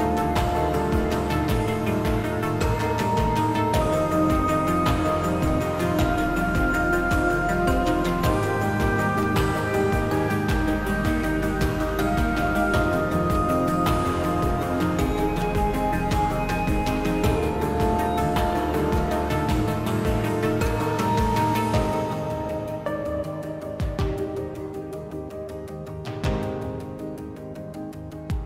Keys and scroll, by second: 7.0 s, 10.6 s, 19.5 s.